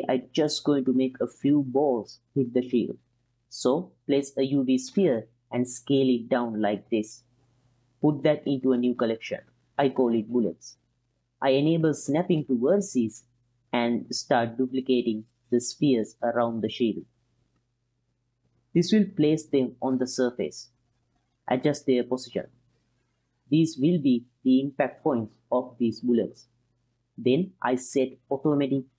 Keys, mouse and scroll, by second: 1.6 shift+click, 2.8-3.9 middle drag, 4.2 shift+a, 5.5 s, 6.8 click, 7.1 s, 7.8 click, 8.2 m, 9.8 l, 11.8 click, 12.2-14.1 drag, 15.1-19.6 typing, 15.6 drag, 16.0 click, 16.6 click, 17.6 drag, 18.0 click, 18.3 click, 21.1 g, 21.8 click, 22.2 g, 22.9 click, 23.6 click, 23.6 g, 24.0 click, 24.2 g, 25.0 g, 25.3-25.7 drag, 26.1 g, 26.5-27.2 drag, 28.0 click.